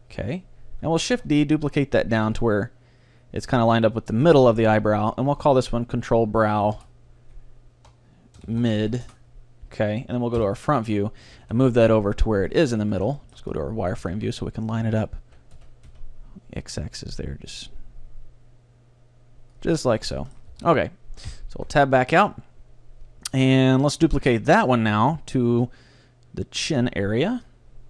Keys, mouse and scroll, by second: 1.2 shift+d, 4.8-7.3 drag, 10.4 KP_1, 11.1-12.6 middle drag, 11.4 g, 12.6-14.4 drag, 12.9 z, 13.2-15.6 middle drag, 14.0 g, 19.8-21.6 drag, 19.9-22.1 middle drag, 20.6 Tab, 21.3 KP_3, 21.6 z, 24.6 Tab, 25.6 shift+d, 27.4-27.8 drag.